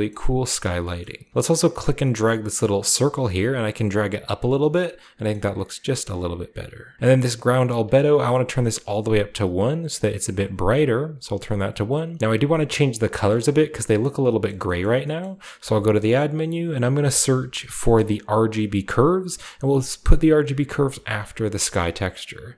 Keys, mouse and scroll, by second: 0.6-2.0 scroll up 2, 1.4-4.3 drag, 4.5 scroll down 1, 4.7-5.3 middle drag, 5.8 drag, 6.4 click, 8.2 click, 9.9 click, 11.0 click, 12.2-12.5 scroll up 1, 12.5 scroll down 1, 12.6 scroll up 1, 14.8-16.8 middle drag, 15.0-16.8 scroll up 2, 15.7 shift+a, 16.4-17.4 drag, 17.1-17.7 typing, 18.9 click, 21.1 drag, 21.4 scroll down 1, 21.5 middle click.